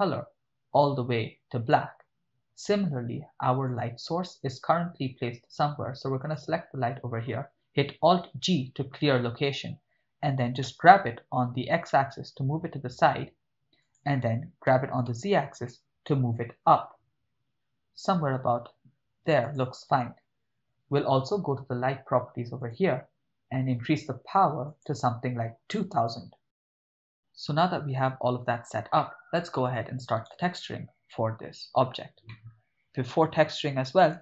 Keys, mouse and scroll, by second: 3.7 click, 6.3 click, 8.1 alt+g, 10.7 g, 11.5 x, 13.8 click, 14.7 g, 15.1 z, 19.5 click, 22.6 click, 24.7-26.4 drag, 26.8-28.0 ctrl+middle drag, 29.0-29.4 ctrl+middle drag, 30.4 right click, 32.3-33.5 ctrl+middle drag.